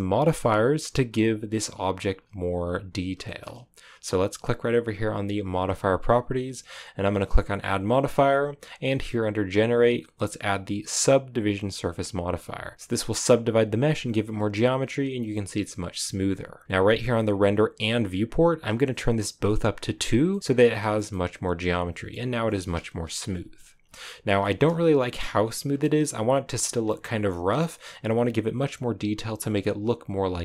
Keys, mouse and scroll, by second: 1.1 right click, 2.1 scroll down 2, 3.2-11.7 shift+middle drag, 13.0-13.8 scroll up 5, 13.8-14.7 scroll down 3, 14.7-16.8 scroll down 1, 16.8-20.2 drag, 20.2 middle click, 20.4-20.7 scroll up 4, 20.7-22.8 shift+middle drag, 22.8 KP_0, 23.8-24.3 scroll up 6, 24.3 shift+middle click, 24.6-25.0 scroll up 3, 25.7-27.2 shift+middle drag, 27.2-30.4 scroll down 2.